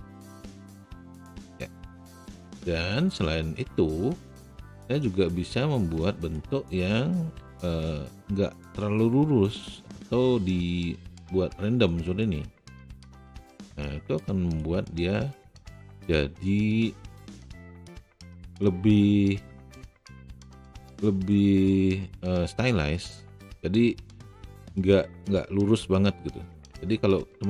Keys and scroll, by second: 7.3 w.